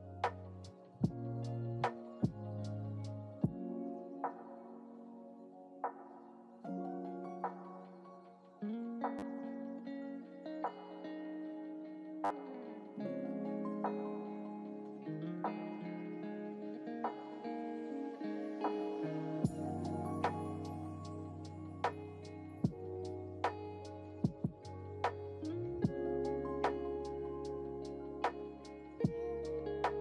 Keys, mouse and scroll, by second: 11.4 drag, 12.9 ctrl+z, 13.6 ctrl+z, 16.1 click, 18.1-18.4 drag, 19.1 click, 19.8 click, 20.7 click, 22.0 click, 22.9-26.4 scroll down 1, 26.4-27.4 drag, 29.0 click.